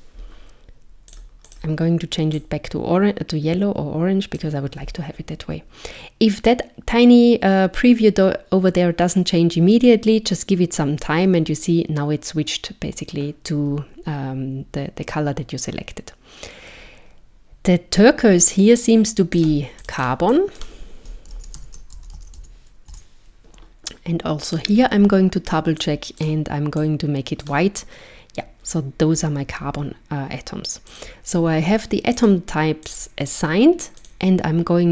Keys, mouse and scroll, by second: 1.5 click, 19.4 click, 19.8 click, 20.0 click, 24.5 click, 30.9 click, 32.2 click, 32.9 click, 34.0 click.